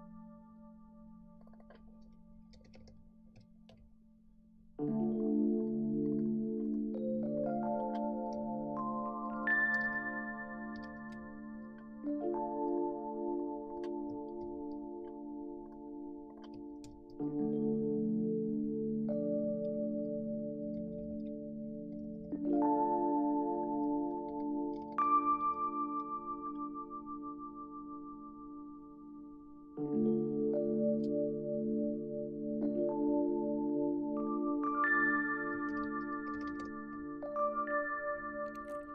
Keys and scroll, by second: 2.3-3.4 typing, 3.7 Return, 8.3 typing, 9.5-11.4 typing, 14.4 shift+Down, 16.9 shift+Down, 20.1-21.0 Left, 21.1 Left, 21.9 Right, 22.0 Right, 22.1 Right, 22.2 Right, 22.5 Right, 24.3 Left, 24.4 Left, 24.5 Left, 24.8 Left, 24.9 Left, 25.0 Left, 25.2 Left, 25.3 Left, 25.4 Left, 25.5 Left, 35.7 super+d, 36.0-37.1 typing, 38.4-38.9 typing.